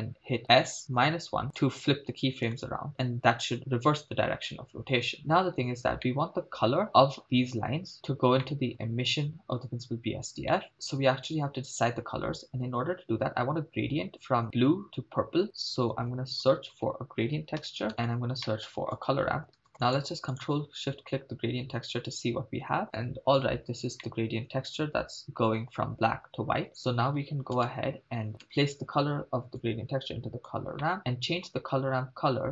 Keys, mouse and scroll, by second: 0.6 s, 1.0 -, 1.0 1, 1.5 Return, 2.7 shift+space, 5.2 shift+space, 6.0-6.9 middle drag, 8.5 middle click, 10.6 middle click, 15.9 shift+a, 18.5 middle click, 18.8 shift+a, 19.9 click, 20.6-21.9 ctrl+shift+drag, 24.1-25.8 middle drag, 27.6 KP_0, 28.4 KP_0, 29.6-30.5 drag, 30.8 middle click, 31.4-31.9 scroll up 2.